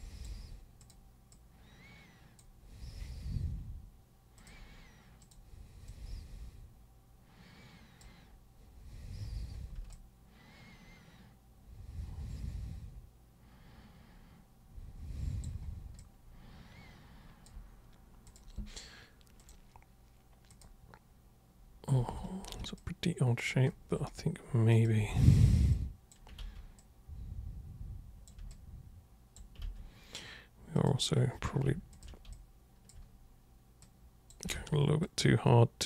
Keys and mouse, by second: 0.8 super+click, 1.3 super+click, 4.3 super+click, 5.2 super+click, 5.9-8.0 super+drag, 9.9-15.4 alt+super+drag, 15.9-17.4 alt+super+drag, 18.2 super+click, 19.4 super+click, 20.5 super+click, 22.1 ctrl+super+1, 22.7 alt+super+click, 24.7 super+click, 25.0 super+w, 25.7 super+click, 26.4 ctrl+super+z, 26.8 super+click, 28.5-29.3 alt+super+drag, 30.7 super+click, 31.9 ctrl+shift+super+click, 32.3-32.8 alt+super+drag, 33.8 super+click, 34.5 ctrl+super+z, 35.0-35.8 super+drag.